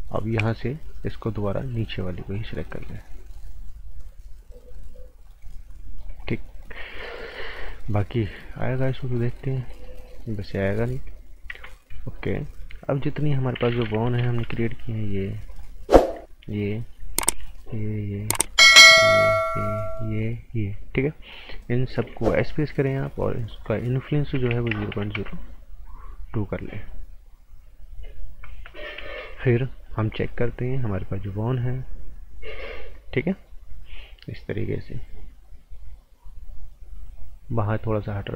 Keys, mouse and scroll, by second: 2.3 click, 2.6 scroll down 1, 2.9 right click, 6.1 scroll down 1, 6.3 right click, 6.6 scroll up 1, 6.8 right click, 7.1 scroll down 1, 7.3 right click, 8.4 scroll up 1, 8.5 right click, 11.5 z, 11.7 scroll down 1, 11.9 right click, 14.4 b, 15.5 click, 16.4 shift+click, 17.6 shift+click, 18.2 right click, 19.0 shift+click, 19.4 shift+click, 19.9 shift+click, 20.4 shift+click, 22.3 s, 23.5 click, 24.3 KP_0, 24.5 KP_Decimal, 24.7 KP_0, 25.1 KP_Enter, 26.6 right click, 29.0 z, 29.8 click, 30.2 z, 31.8 click.